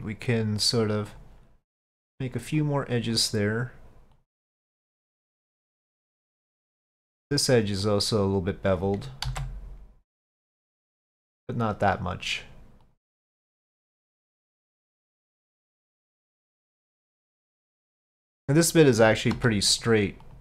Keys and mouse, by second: 2.6 click, 3.1 click, 4.2 click, 4.9-5.9 drag, 6.6 click, 7.9 click, 9.3 ctrl+b, 12.4 click, 12.8 click, 13.8 click, 14.8-15.2 middle drag, 15.7-16.2 shift+drag, 17.3-18.3 drag, 19.4 2, 19.8 click.